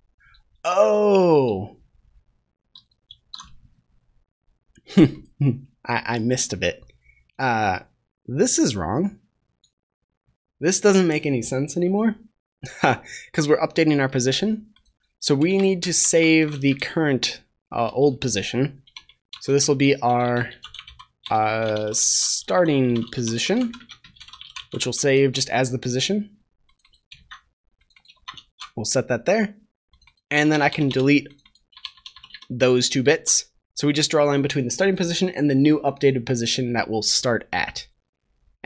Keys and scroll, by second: 25.1 ctrl+s, 27.1 ctrl+c, 28.1 ctrl+v, 28.2 ctrl+s, 33.0 ctrl+s.